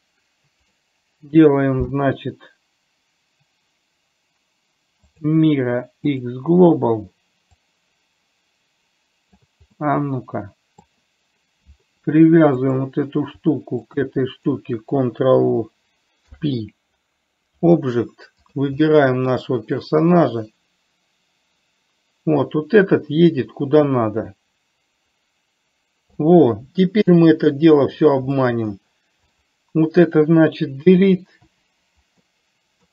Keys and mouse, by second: 2.3-8.0 right drag, 8.0-9.8 drag, 10.1-11.1 middle drag, 14.3 shift+click, 16.5 ctrl+p, 18.9 click, 19.1-19.6 middle drag, 20.6-26.5 drag, 27.4 KP_3, 28.6 middle click, 29.8 click, 31.8 Delete, 32.5 middle click.